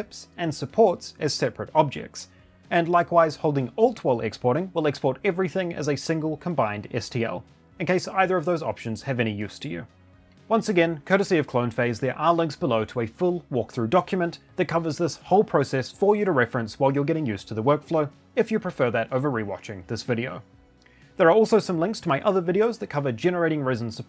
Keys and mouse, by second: 2.6 click, 3.8 alt+click.